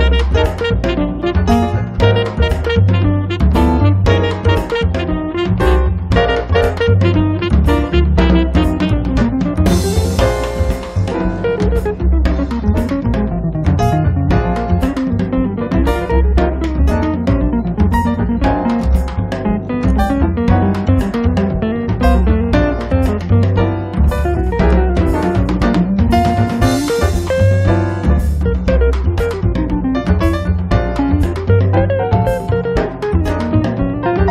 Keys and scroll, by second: 3.2 m, 4.6 Up, 6.8 p, 8.0 1, 8.3 0, 8.6 Return, 12.2 space, 16.7 Delete, 17.8 Delete, 20.5 p, 26.2 space.